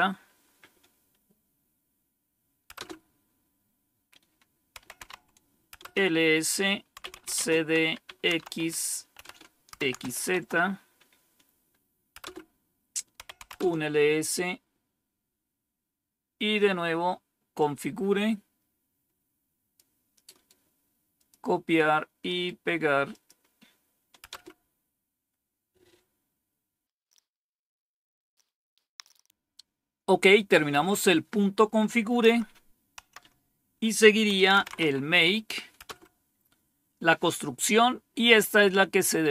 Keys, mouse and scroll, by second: 0.0-0.2 typing, 2.6 Return, 4.5-5.4 typing, 5.7 Return, 6.7-10.4 typing, 12.1 Return, 12.9-13.6 typing, 15.2 scroll down 1, 15.7 scroll down 1, 17.2-17.9 typing, 17.4-19.7 drag, 20.4-24.2 typing, 21.1 click, 22.1 right click, 23.0 click, 32.2 Up, 32.9 Down, 34.0-35.1 typing, 35.7 Return.